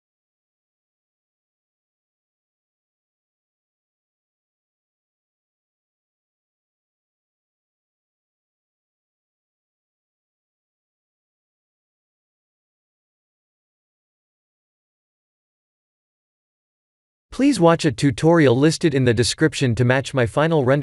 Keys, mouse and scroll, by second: 0.4 click, 0.9 click, 1.7 click, 2.4 click, 3.3 click, 3.4 click, 4.3 click, 5.2 click, 5.8 click, 7.4 click, 8.4 click, 9.0 click, 9.8 click, 10.4-11.7 scroll down 10, 12.6 click, 12.6 scroll down 4, 14.2 click, 15.0 click, 15.3 click, 16.0 click, 17.1 click, 17.6 ctrl+s, 18.7 click, 19.3 click.